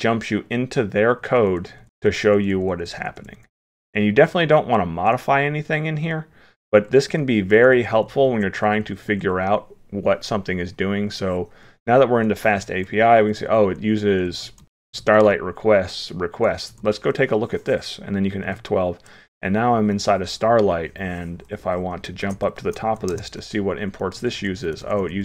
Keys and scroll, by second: 22.2 ctrl+g.